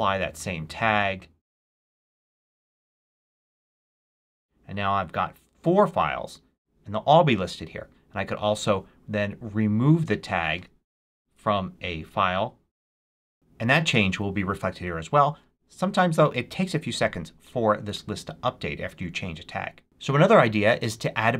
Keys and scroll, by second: 11.0 super+i, 12.7 BackSpace.